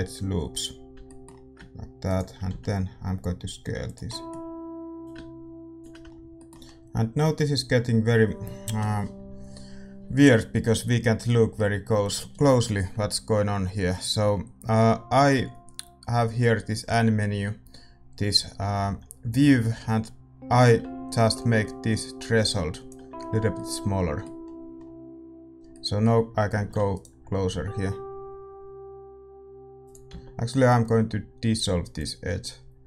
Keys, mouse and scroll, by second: 0.5 middle click, 0.9 a, 1.0-2.0 middle drag, 2.0-4.0 right drag, 2.4 s, 4.0 middle click, 5.0-6.0 drag, 6.0 Tab, 6.0-20.9 middle drag, 20.9-23.5 drag, 23.5-28.4 middle drag, 26.5 a, 26.9-29.8 right drag, 27.4 s, 29.8 s.